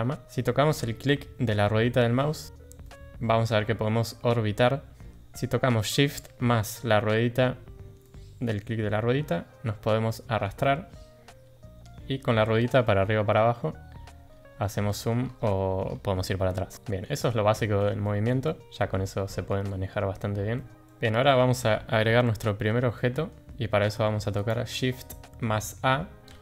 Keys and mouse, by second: 2.8-5.0 middle drag, 8.0-10.4 shift+drag, 10.6-11.8 shift+drag, 14.7 shift+middle drag, 16.7 shift+middle drag, 17.2-17.7 middle drag, 18.0 shift+middle drag, 18.4 shift+middle drag, 19.2 middle drag, 19.6 shift+middle drag, 20.5 middle drag, 20.8 middle click, 22.9-23.3 shift+middle drag, 24.4 click, 26.2 shift+a.